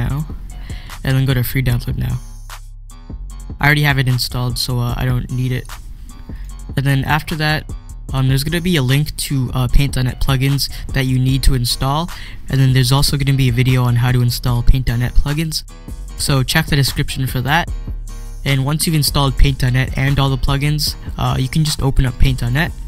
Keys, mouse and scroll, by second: 0.0 click, 2.4 click, 4.8 click, 18.4 click, 22.4 click.